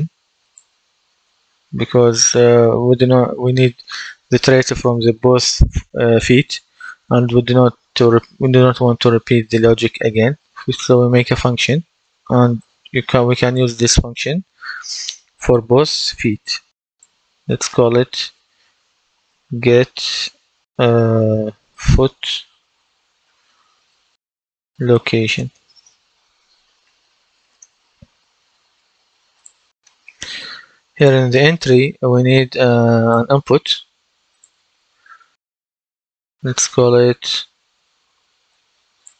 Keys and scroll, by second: 17.8 F2, 18.8-19.9 typing, 21.3-22.9 typing, 24.1-26.1 typing, 27.4 Return.